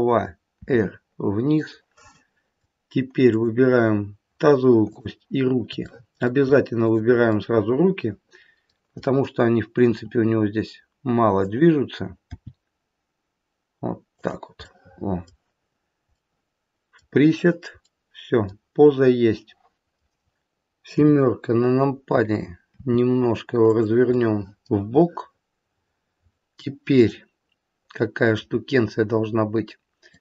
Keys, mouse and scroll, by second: 0.5 r, 2.1 middle click, 3.1 click, 4.8 shift+click, 5.8 middle click, 6.8 shift+click, 7.4 middle click, 9.8 r, 12.3 g, 14.6 middle click, 16.1 middle click, 17.7 middle click, 19.8 middle click, 20.9 KP_7, 22.7 r, 24.2 middle click, 25.1 middle click, 26.9 middle click, 26.9-27.3 scroll up 1, 28.5 scroll down 1, 30.0 click.